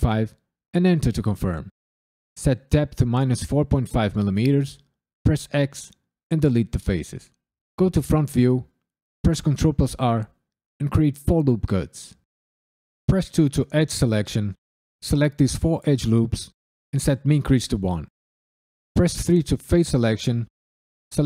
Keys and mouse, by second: 0.7 KP_Enter, 2.3-3.8 drag, 5.5 x, 7.7 KP_1, 9.2 ctrl+r, 10.5 4, 10.9 click, 11.2 right click, 13.0 2, 13.8 alt+click, 14.3 alt+shift+click, 14.9 alt+shift+click, 15.5 alt+shift+click, 17.0 shift+e, 17.3 KP_1, 17.8 KP_Enter, 18.9 3, 20.5 alt+click.